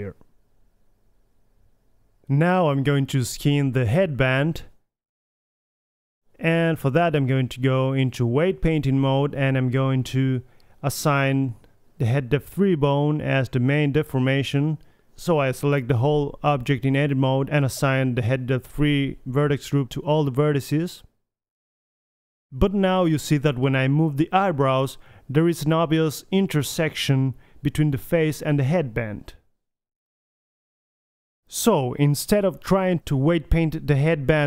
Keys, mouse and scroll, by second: 2.4-3.2 middle drag, 3.2 a, 4.3 middle click, 5.1-6.2 right drag, 5.8 alt+h, 6.2 middle drag, 6.2 a, 7.0 click, 7.4-8.1 middle drag, 8.1-11.2 drag, 11.2-11.7 right drag, 12.3 click, 12.9-16.0 drag, 15.2 Tab, 16.0 middle click, 16.7 a, 17.1 a, 17.9 alt+h, 19.1-20.6 drag, 19.9 Tab, 21.7 click, 22.3 drag, 22.3 right drag, 23.2 middle drag, 23.9 g, 25.2 drag, 25.5 g, 26.2 middle drag, 26.4-27.2 middle drag, 27.5 alt+g, 27.7 a, 28.2 KP_1, 28.8 middle drag, 29.6 g, 30.4-30.8 drag, 32.2-33.5 middle drag, 33.8 middle click, 34.3 g.